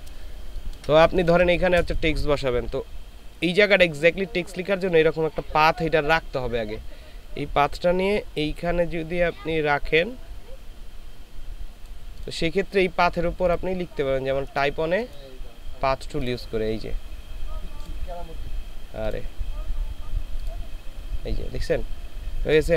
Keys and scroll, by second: 0.5 ctrl+space, 1.1 ctrl+space.